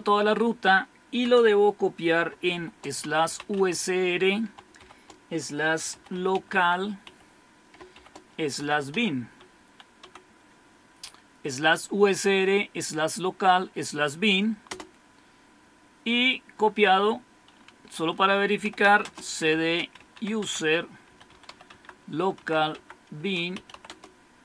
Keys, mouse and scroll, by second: 1.3 space, 2.5-9.4 typing, 10.0 Tab, 14.7 Return, 18.4-24.4 typing.